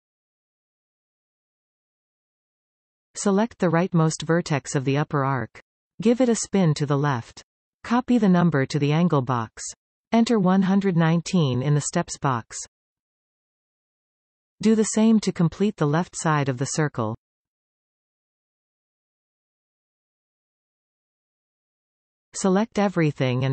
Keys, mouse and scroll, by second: 4.6 click, 6.5 click, 8.5-11.6 drag, 11.7 click, 12.5 1, 16.0-17.1 scroll up 3, 17.1 click, 18.5-22.3 drag, 22.3-22.7 scroll down 2.